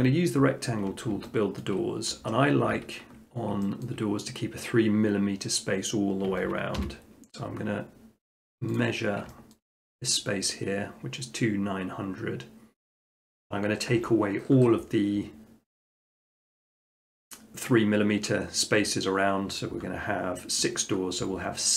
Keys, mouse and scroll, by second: 1.1 shift+middle click, 1.7 shift+middle click, 2.4 middle click, 3.2 middle click, 3.8 shift+middle click, 6.8 t, 8.8 click, 9.6-10.4 shift+middle drag, 13.9 Escape.